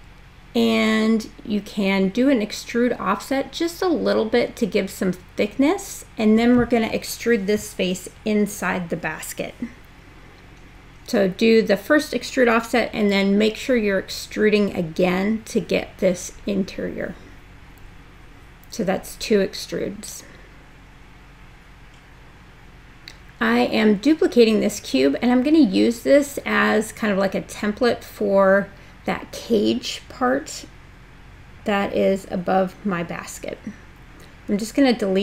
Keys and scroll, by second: 9.3 super+e, 21.2 w.